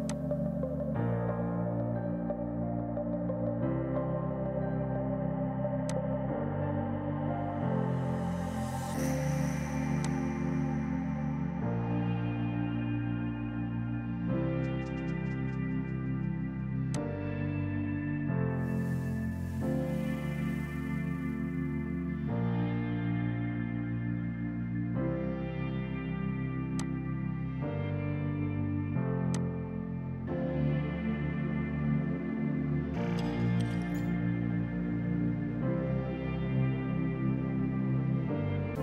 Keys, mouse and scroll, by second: 0.1 click, 5.9 click, 10.1 click, 10.1 typing, 26.8 click, 26.8 typing, 29.4 click.